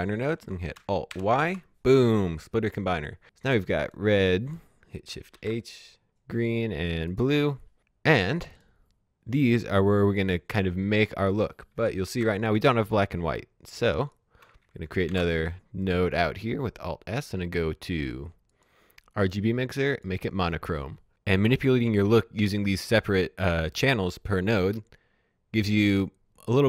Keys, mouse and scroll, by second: 0.5 alt+Num_Lock, 0.8 alt+y, 3.6 click, 5.1 shift+h, 5.9 click, 8.4 click, 11.5 shift+Num_Lock, 12.0 shift+h, 13.8 click, 15.1 alt+s, 15.8 click, 18.5 click.